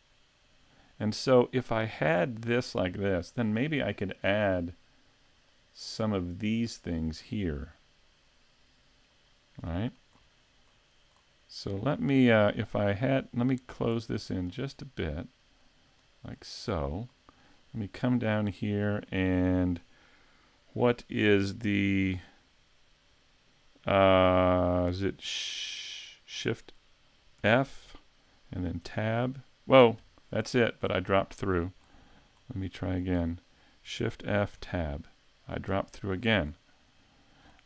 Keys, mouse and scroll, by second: 2.6 middle click, 3.9-5.2 scroll up 3, 4.3 middle click, 5.2 middle click, 7.4 scroll down 1, 7.7 middle click, 9.3-10.5 scroll up 3, 9.7 middle click, 10.7 scroll up 3, 11.3 scroll down 1, 12.9 click, 14.5 right click, 14.9-15.6 scroll down 1, 15.6 click, 16.7-17.9 scroll up 4, 17.1 middle click, 18.0 shift+middle click, 18.5 middle click, 19.1 shift+middle click, 27.5 shift+f, 30.9 scroll down 3, 31.4 middle click, 31.8 scroll up 2, 32.4 scroll up 3, 32.7 shift+middle click, 33.2 middle click, 34.1 shift+f, 36.2 scroll up 2, 36.5 scroll down 4, 37.5 scroll up 3.